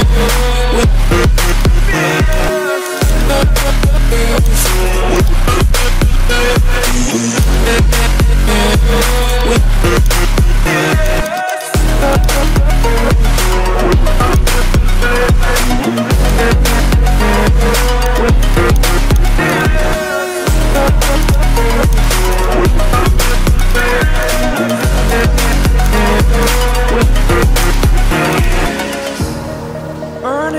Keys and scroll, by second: 6.1 ctrl+z, 29.9 ctrl+s, 30.2 ctrl+d.